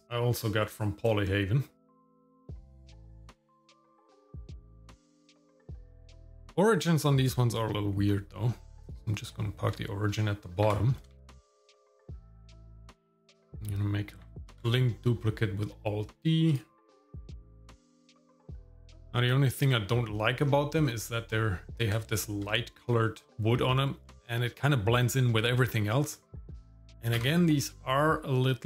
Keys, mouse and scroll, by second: 2.3 click, 2.6 click, 3.2 click, 3.8 click, 4.0 shift+middle click, 4.1 scroll up 2, 4.4 click, 4.6 g, 5.1 r, 5.5 g, 6.1 shift+click, 6.3 shift+s, 10.6 g, 11.8 shift+click, 12.0 shift+s, 12.3 g, 12.8 shift+middle click, 13.3 click, 14.5 alt+d, 16.9 r, 17.8 g, 18.4 shift+middle click, 18.8 shift+middle click, 18.9 scroll up 1, 19.1 shift+middle click, 20.0 middle click, 20.4 scroll up 2, 22.0 shift+middle click, 23.3 middle click, 24.0 scroll down 1, 25.6 middle click, 26.0 scroll up 2, 26.3 middle click, 26.6 click, 27.2 KP_Divide.